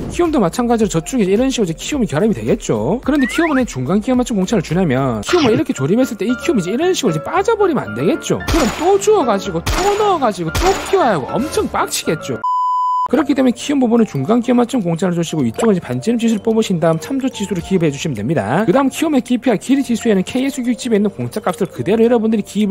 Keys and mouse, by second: 1.7 click, 2.8 click, 6.9 click, 7.5 click.